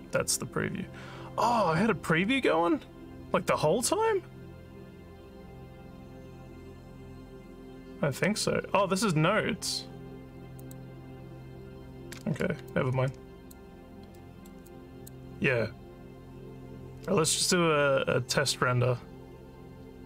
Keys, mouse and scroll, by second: 10.6 click, 12.7 alt+click, 14.2 alt+middle click, 14.7 alt+click.